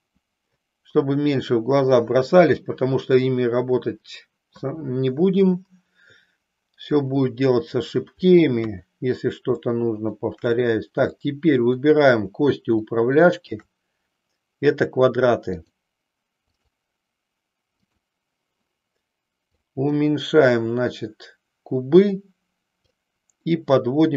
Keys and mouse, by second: 8.5 KP_3, 9.6 shift+middle click, 11.1 click, 12.9 shift+click, 15.5-16.7 drag, 17.8 click, 19.9-22.8 drag.